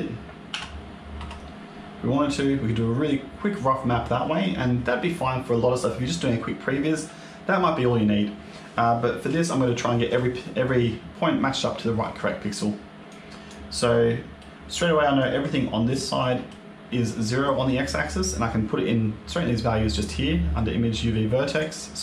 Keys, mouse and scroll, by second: 0.4 s, 2.7-3.9 scroll up 3, 9.5 shift+middle click, 10.3-12.4 scroll up 2, 12.4 click, 13.0 click, 13.9 middle click, 15.1 click, 16.1 middle click, 21.4 click.